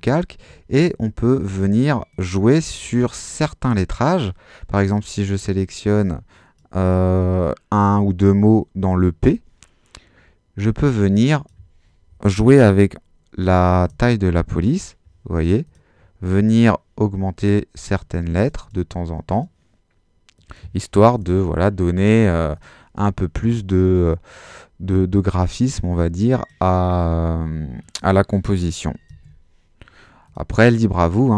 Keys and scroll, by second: 13.5-14.3 typing, 20.8-21.6 typing, 28.9-29.7 typing.